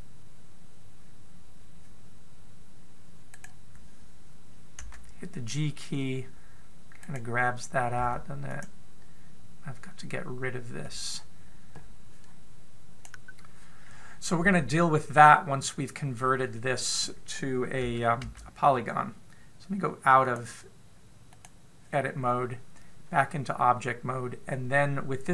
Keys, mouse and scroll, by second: 2.4 click, 4.0 right click, 5.5 g, 8.7 g, 15.5-18.8 scroll down 1, 18.8 scroll down 1, 21.1 click.